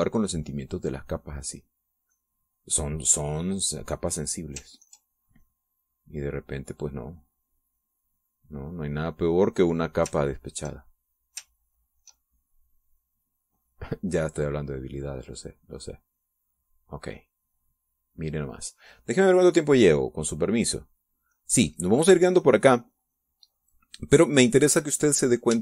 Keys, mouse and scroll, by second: 1.4-3.9 drag, 6.2 ctrl+click, 6.8-11.0 ctrl+drag, 11.9 ctrl+click, 13.0 ctrl+click, 13.9-20.1 ctrl+drag, 22.0 click, 22.7 click, 23.5 middle click, 24.0 middle click.